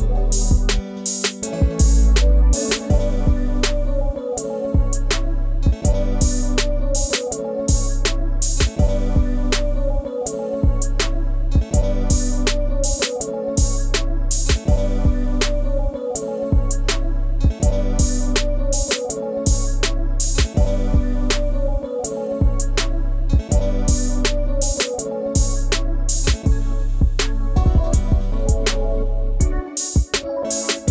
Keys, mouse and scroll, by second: 4.8 shift+click, 7.0 double click, 11.2-12.0 scroll up 1, 12.0-12.5 scroll down 1, 28.3 scroll up 1, 28.5 ctrl+space, 28.7 ctrl+click, 28.9 ctrl+space.